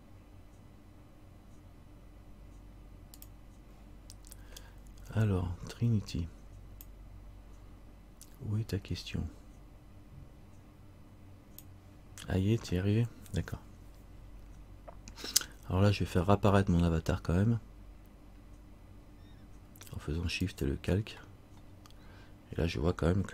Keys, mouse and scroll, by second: 14.5 scroll up 1, 18.0 scroll up 1, 20.6 shift+click, 21.8-23.3 scroll down 1.